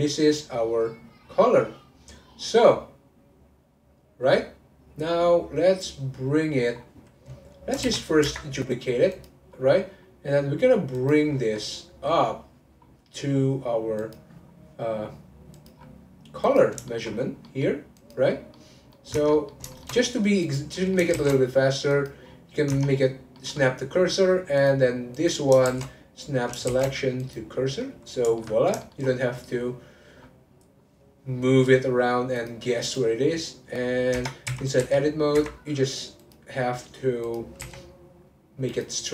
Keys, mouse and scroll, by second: 1.2-2.5 scroll down 1, 2.5-3.1 scroll up 1, 6.8-7.8 scroll down 4, 7.8 shift+d, 9.1 click, 9.9-10.9 scroll down 1, 10.9 click, 11.3 scroll down 4, 11.5 middle click, 12.2-12.8 scroll up 3, 12.8-13.8 scroll down 2, 14.0 click, 15.5 click, 15.7-16.4 scroll up 2, 16.4 click, 16.9 shift+middle click, 17.1-17.4 scroll up 2, 17.4 middle click, 18.0 click, 18.5 middle click, 19.1 Tab, 19.3 middle click, 20.0-20.4 scroll up 2, 20.4 click, 20.7 middle click, 21.1 shift+s, 22.3-22.7 scroll down 3, 22.7 Tab, 22.9-23.3 scroll down 4, 23.3 middle click, 23.5-24.5 scroll down 1, 24.5 click, 25.1 click, 25.6 shift+a, 26.6 shift+s, 27.5 scroll up 1, 27.8 middle click, 28.5 scroll up 2, 28.8-30.1 shift+middle drag, 30.1-32.3 scroll up 1, 32.3-34.1 drag, 34.1 Tab, 34.5 a, 36.2-37.6 drag, 37.6 r.